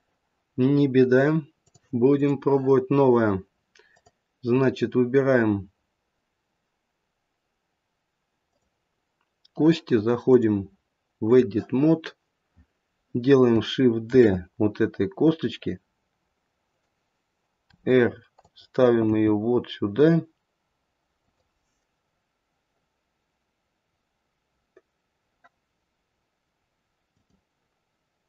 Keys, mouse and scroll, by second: 1.6 click, 3.9 click, 8.4 click, 10.2 click, 14.1 shift+d, 17.7 r, 19.1 g, 27.1 click.